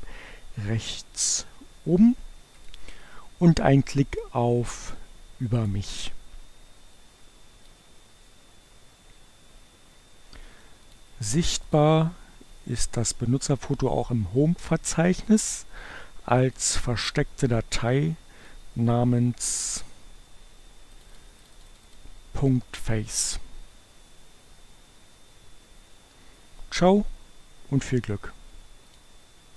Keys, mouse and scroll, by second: 2.6 click, 5.5 click, 7.0-8.2 drag, 10.9 click, 11.8 click, 13.2 click, 15.4 click, 16.7 click, 18.2-20.5 drag, 21.0 click, 28.7 click.